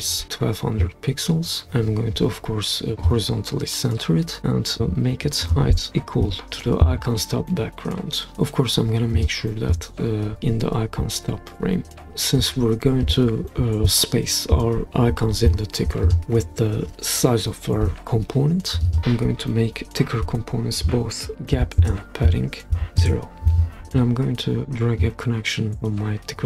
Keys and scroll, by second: 1.0 typing, 6.2 Page_Down, 19.0 Return, 21.5-23.0 typing.